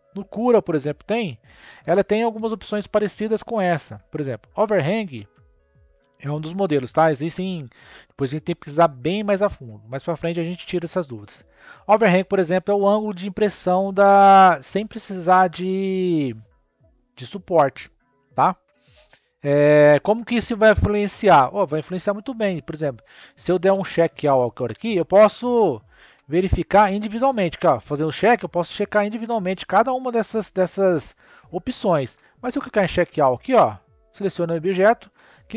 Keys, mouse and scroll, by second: 26.2-29.2 scroll up 1, 32.8-35.5 drag.